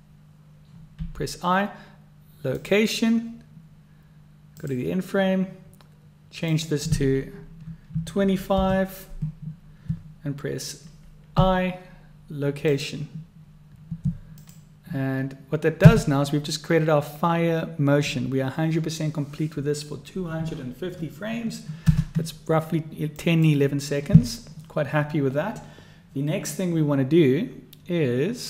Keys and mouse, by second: 1.0 i, 4.6 click, 6.5-9.6 drag, 11.3 i, 14.3 click, 15.8 space, 21.9 space, 23.1 click.